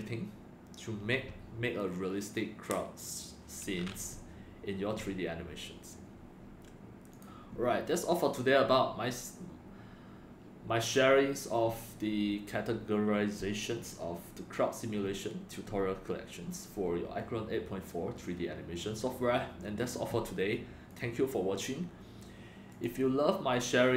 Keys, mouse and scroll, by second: 7.1 click, 20.9 click, 22.7 click, 23.8 scroll down 1.